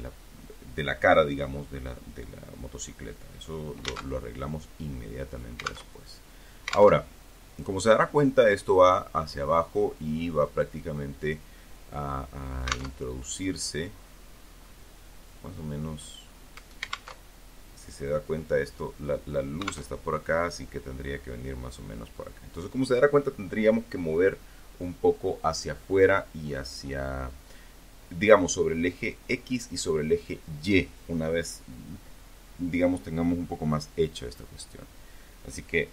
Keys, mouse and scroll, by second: 2.3 alt+Tab, 4.0 alt+Tab, 5.1 alt+Tab, 9.7 click, 11.1 alt+Tab, 11.3 alt+middle click, 12.1 click, 14.1-14.7 scroll down 2, 15.3 alt+Tab, 18.1 alt+Tab, 34.1 KP_1, 35.5 e.